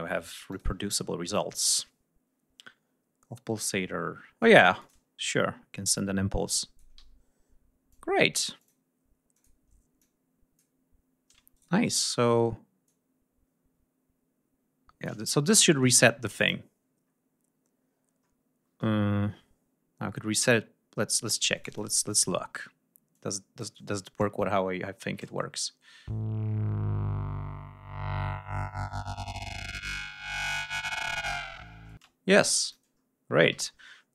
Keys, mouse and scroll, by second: 0.4 click, 4.7 click, 5.2 scroll down 2, 5.6 scroll up 2, 6.4 click, 6.9 d, 7.8 click, 8.5 click, 9.2 click, 9.9 click, 11.4 shift+right click, 11.9 shift+click, 12.8-15.1 drag, 15.2 ctrl+scroll down 1, 16.3 click, 17.0 scroll up 1, 17.9 scroll up 1, 18.6 scroll down 2, 19.3 scroll down 2, 21.4 click, 23.0 click, 25.0 space, 31.8 space, 32.5 click, 33.5 r.